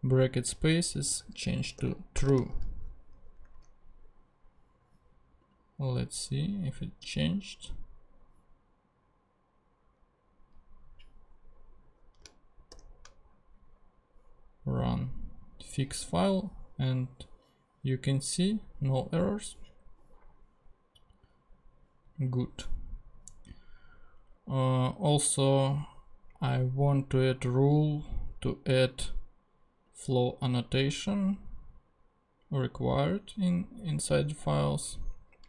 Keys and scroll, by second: 1.5-2.9 typing, 3.5 ctrl+Tab, 12.7 shift+super+p.